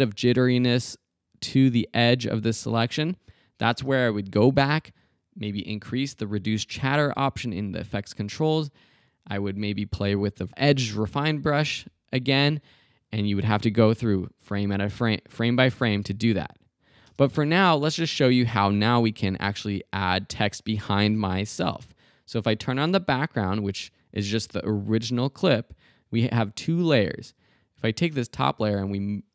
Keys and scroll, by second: 3.7 space, 15.8 space, 17.1 space.